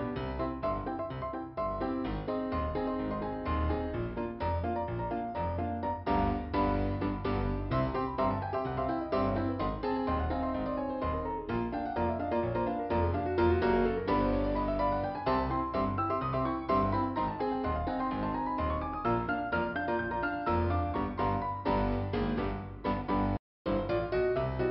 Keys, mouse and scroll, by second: 0.4 scroll up 1, 1.3 click, 4.6 click, 5.9 click, 7.2 click, 11.3 scroll down 1, 11.9 click, 14.0 middle click, 14.6 scroll up 2, 14.8 click, 16.3 click, 18.3 scroll down 2, 18.8 click, 20.4 middle click, 22.0 scroll up 1, 22.1 click, 22.3 click, 23.3 ,, 23.7 right click, 24.5 click.